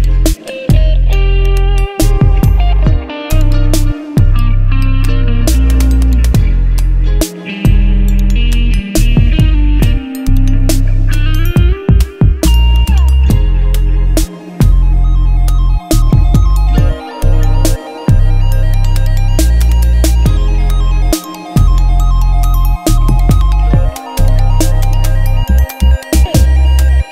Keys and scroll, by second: 0.1 v, 0.2 Up, 0.4 Right, 0.7 Down, 2.7 u, 4.2 2, 4.4 Return, 5.3 Return, 7.9 alt+Tab, 8.7 alt+Tab, 9.5 space, 9.8 ctrl+Tab, 10.4 v, 14.3 ctrl+t, 19.6 Right, 20.6 Left, 20.8 Down, 21.1 Left, 22.7 Down, 22.9 Left, 24.3 Up, 24.7 Return, 26.1 v, 26.2 Up.